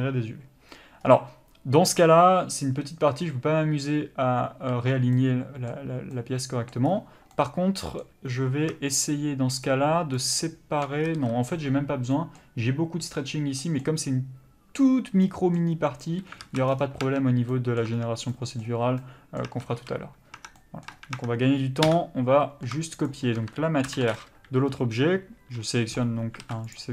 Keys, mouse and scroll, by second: 5.1 middle click, 6.8-7.3 scroll up 1, 7.3 middle click, 9.0 alt+shift+click, 11.0 scroll down 1, 11.1 a, 13.7 middle click, 16.4 alt+a, 16.7-17.1 scroll down 1, 17.1 Tab, 17.5 middle click, 17.9 Tab, 18.2-18.8 scroll up 1, 18.8 Tab, 19.0 middle click, 19.5 Tab, 19.8 a, 20.3 Tab, 20.6 middle click, 20.9 Tab, 21.8 KP_Divide, 23.0 shift+click, 26.4 alt+a, 26.7 click.